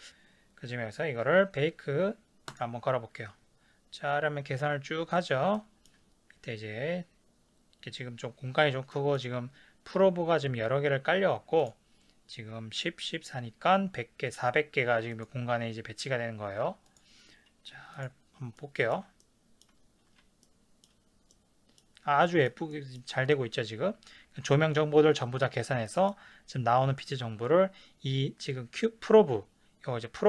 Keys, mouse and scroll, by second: 2.7-4.0 drag, 4.0-11.6 middle drag, 11.6 click, 15.2 click, 16.9 click, 18.0 click, 18.6-25.8 middle drag.